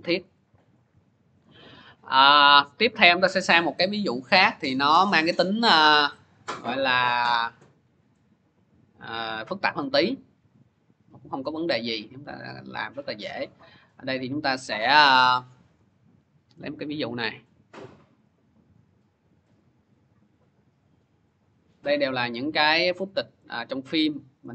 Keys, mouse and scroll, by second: 0.0 alt+Tab, 1.4 click, 2.1 click, 2.3 click, 4.1 click, 5.1 click, 6.2 click, 6.6-7.3 scroll, 7.3-9.0 scroll, 9.1 scroll, 10.4-11.2 scroll, 11.5-13.1 scroll, 16.4 click, 16.6 click, 17.4 click, 18.1 click, 18.3 click, 21.5 click, 22.2 scroll, 23.2 scroll, 24.3 scroll.